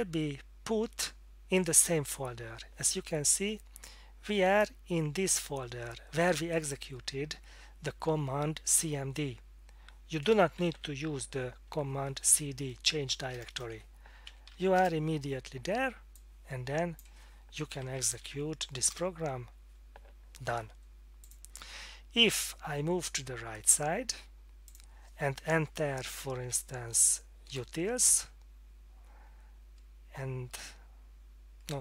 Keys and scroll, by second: 10.4-11.2 typing, 13.3-15.0 typing, 17.7-18.7 typing, 18.9 Return, 26.2 Down, 26.4 Down, 27.5 Return, 30.5 Return.